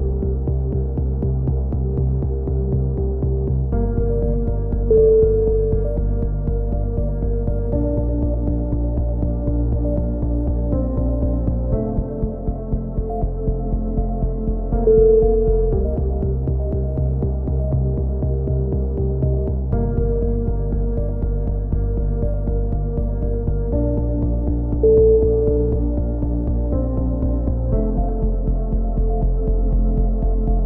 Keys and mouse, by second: 0.1 click, 0.9-3.0 drag, 0.9 z, 1.8 KP_3, 2.2 z, 3.1 click, 3.3 a, 3.3 z, 6.8 right click, 7.0 z, 7.4 e, 7.5 KP_3, 8.1 click, 8.9 a, 8.9 z, 9.0 click, 9.9 right click, 10.5 f, 10.7 a, 11.0 KP_7, 11.2 z, 11.7 click, 11.7 right click, 12.5 a, 12.6 z, 12.8 click, 13.9 click, 14.0 KP_1, 14.1 z, 17.3 z, 17.6 click, 19.1 click, 20.5 click, 20.8 right click, 21.4 ctrl+z, 21.9 ctrl+z, 22.1 right click, 22.5 e, 22.8 ctrl+KP_7, 23.2 click, 23.9 click, 23.9 z, 24.1 z, 24.3 right click, 24.9 f, 25.1 click, 25.1 a, 26.6 right click, 26.6 e, 27.4 click, 27.8 a, 27.9 ctrl+z, 28.1 ctrl+z, 28.2 a, 28.4 click, 29.1-30.3 right drag, 29.7 f, 29.8 a, 30.3 ctrl+KP_7.